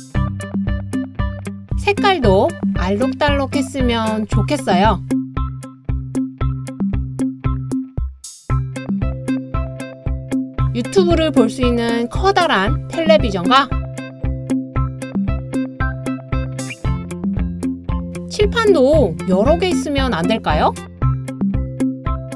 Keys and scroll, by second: 10.1 super+o, 11.0 Down, 11.1 Down, 11.2 Down, 11.3 Down, 11.5-11.9 typing.